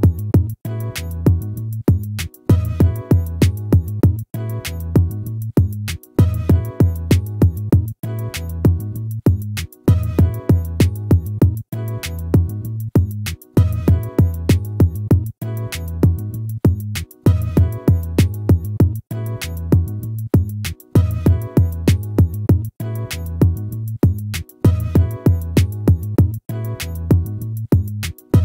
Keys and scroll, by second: 21.0 ctrl++.